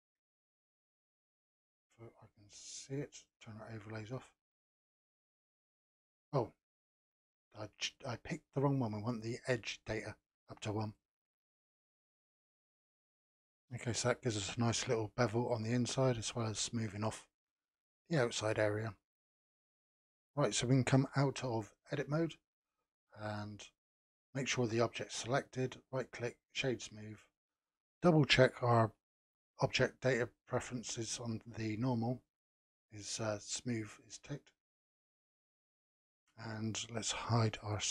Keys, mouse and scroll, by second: 3.1 click, 4.5-7.0 scroll down 1, 7.0-12.4 drag, 12.6 scroll down 2, 13.2-16.3 middle drag, 17.1-21.3 middle drag, 21.9 Tab, 22.9 click, 23.9 click, 24.6 click, 25.4-28.5 right drag, 29.6 click, 34.7-37.4 middle drag, 37.4 n.